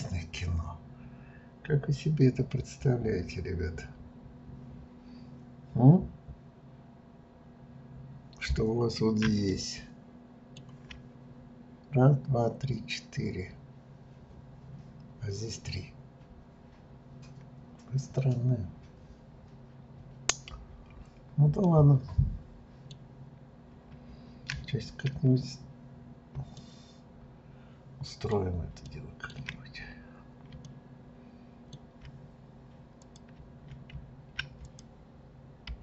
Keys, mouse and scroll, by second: 9.4-12.5 shift+middle drag, 21.5-24.6 middle drag, 25.5-26.5 scroll down 1, 26.5-29.7 shift+middle drag, 29.7-30.1 scroll up 2, 30.6-33.0 shift+middle drag, 33.0 click, 34.6 click, 35.7 g.